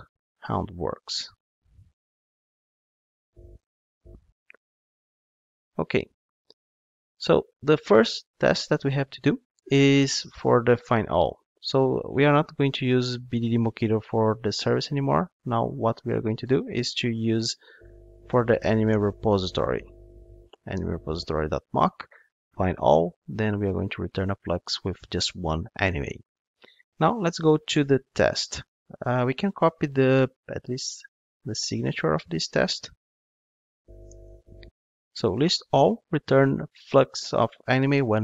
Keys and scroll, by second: 1.6 super+c, 2.1 ctrl+Tab, 4.0 super+v, 18.8 Return, 29.0 ctrl+Tab, 34.5 super+v.